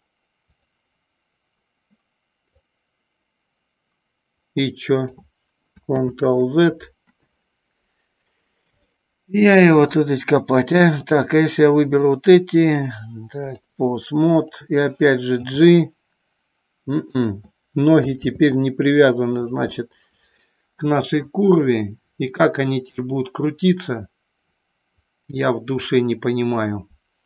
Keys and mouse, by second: 0.5 click, 2.6-5.3 drag, 6.4 ctrl+z, 12.8-13.7 drag, 14.5 click, 15.6 g, 17.2 click, 18.6 ctrl+z.